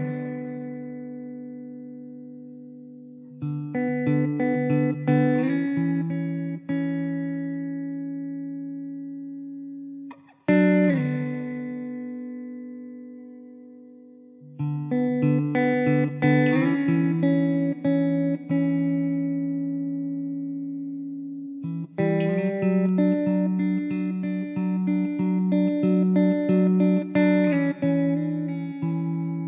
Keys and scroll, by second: 1.7 KP_0, 3.3 KP_0, 5.1 ctrl+s, 6.9 s, 7.6 z, 10.5 shift+d, 11.7 s, 13.6 s, 18.8 ctrl+z, 20.6 alt+z, 21.2 Tab, 21.7 3, 23.9 Tab, 24.0 alt+z, 26.3 0.